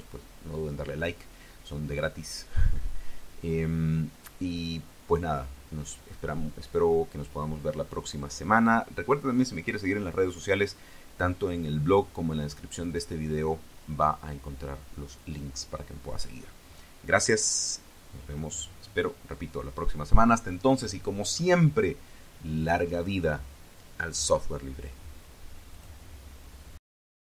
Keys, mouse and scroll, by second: 25.6 click, 27.0 click.